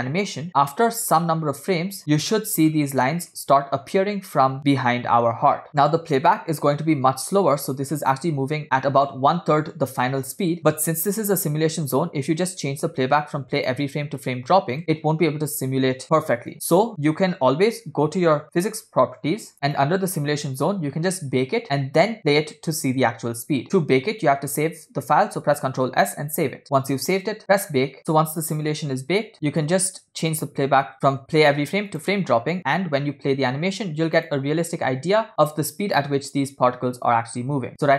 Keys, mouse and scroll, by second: 0.5 scroll up 1, 1.8-2.2 scroll up 4, 2.8 scroll down 2, 3.1 shift+middle click, 5.2 scroll down 3, 5.8 space, 7.6 scroll down 1, 11.4 space, 12.5-14.5 drag, 14.8 space, 15.3 scroll down 1, 16.5 click, 16.8 space, 18.7 click, 19.7 click, 27.0 click, 28.5-29.5 scroll down 5, 30.9-32.2 drag, 34.2 click, 34.7 space, 35.3 scroll up 3, 35.6 scroll down 2.